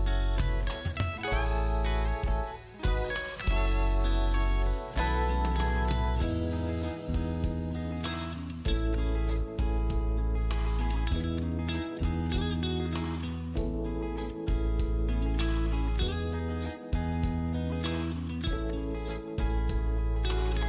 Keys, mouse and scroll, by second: 5.2 space, 5.3 click, 5.6-6.7 scroll up 1, 6.7 click, 10.4 right click, 12.1 click, 12.7-13.2 scroll up 1, 14.1 click, 16.0-17.6 scroll down 1, 17.9 ctrl+space.